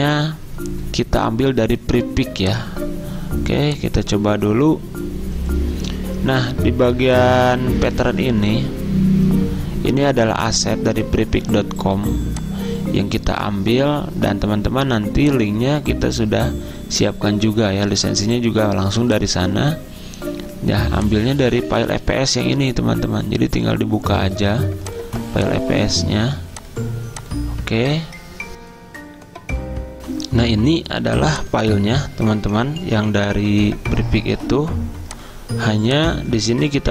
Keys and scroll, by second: 30.0 Delete.